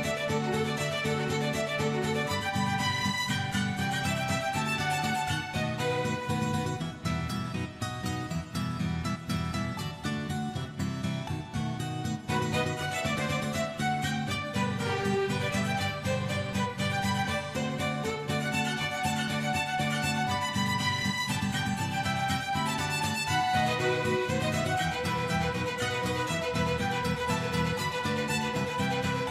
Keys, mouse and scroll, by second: 0.6 click, 1.3 click, 1.6-2.7 drag, 2.7 a, 3.2 middle click, 3.5-4.1 drag, 5.1 click, 5.4 shift+d, 6.3-9.0 drag, 9.6 click, 10.4 drag, 10.8 click, 11.1 click, 11.4 click, 12.2 click, 13.2 click, 14.6-15.8 drag, 16.2 click, 17.1 click, 17.4-18.5 drag, 19.0 click, 19.1-19.5 right drag, 19.5 click, 19.9-21.3 right drag, 21.3 click, 21.5 right click, 22.0-23.2 drag, 23.5 click, 24.4 click, 25.0-25.4 middle drag, 25.5 click, 25.7 middle click, 25.9-26.7 middle drag, 26.9 click, 28.1 click, 28.6-29.3 drag.